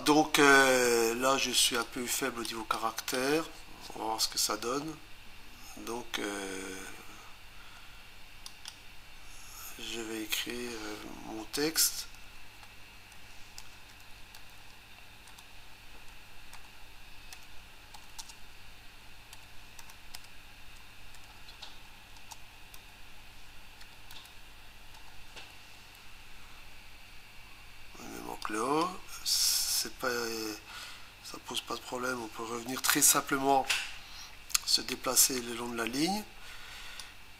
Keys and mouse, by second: 1.8 click, 2.7 click, 8.5 click, 13.4-17.3 typing, 19.4 p, 20.9-21.7 typing, 22.8 2, 23.9-25.0 typing, 28.4 click, 37.0 click.